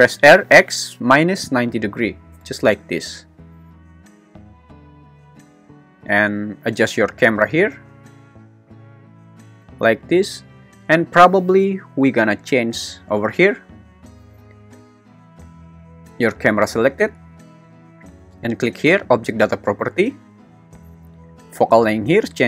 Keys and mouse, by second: 0.0-1.6 typing, 2.3 Return, 7.4 g, 7.7 z, 9.6 click.